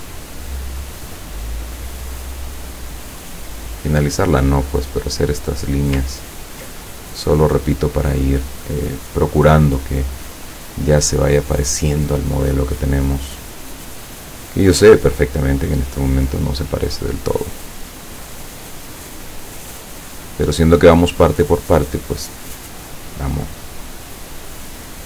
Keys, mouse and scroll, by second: 1.1 click, 3.3 click, 5.2 click, 6.2 ctrl+scroll down 2, 6.9 ctrl+middle click, 20.2 click, 23.0 click.